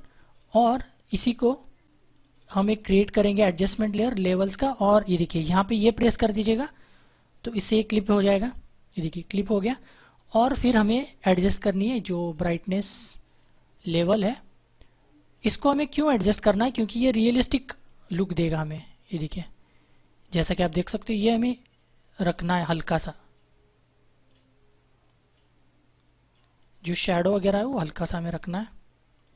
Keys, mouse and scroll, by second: 2.1 click, 8.3 click, 11.5 click.